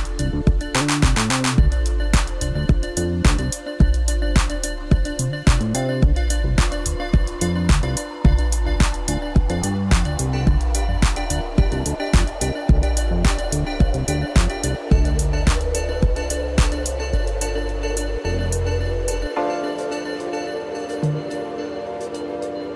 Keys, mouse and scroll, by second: 0.8-1.2 scroll down 3, 2.4 Tab, 4.7-5.5 scroll down 3, 5.5 click, 6.5-7.1 drag, 7.9 click, 12.1-15.2 scroll up 2.